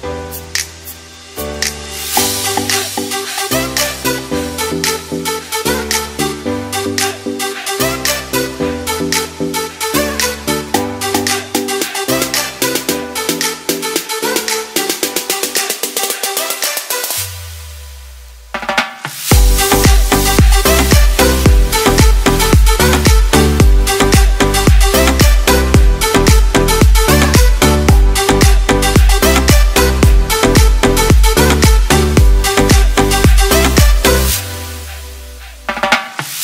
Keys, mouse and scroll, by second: 1.3 middle click, 3.7 shift+middle click, 5.9 click, 10.6 click, 11.3 middle click, 17.0 click, 17.7-19.3 scroll down 5, 19.3-20.0 scroll down 1, 20.3 scroll up 1, 20.5 shift+middle click, 20.9-21.3 scroll up 2, 21.1 shift+middle click, 22.7 click, 30.9 click, 34.6 click.